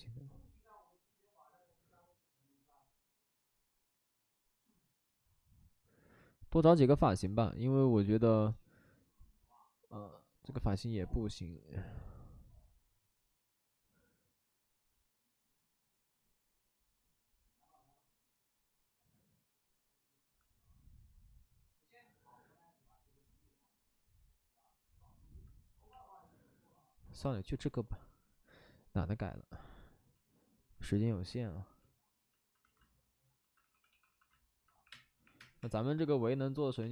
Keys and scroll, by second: 33.3 alt+s, 33.6-35.5 typing, 36.8 space.